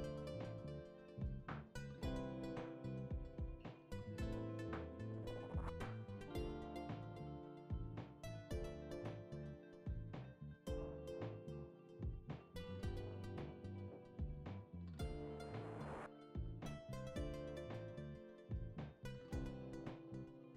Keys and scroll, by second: 0.1-0.8 scroll, 1.4-1.9 scroll, 2.1-2.7 scroll, 2.7 scroll, 6.9-8.8 scroll, 8.8 scroll, 10.3 ctrl+z, 10.8 ctrl+space, 10.9 ctrl+space, 11.0 ctrl+alt+z, 14.0 scroll, 15.0-15.4 scroll, 15.3 ctrl+z, 16.6-17.3 scroll, 18.0 ctrl+z, 18.0 scroll, 18.7-19.1 scroll.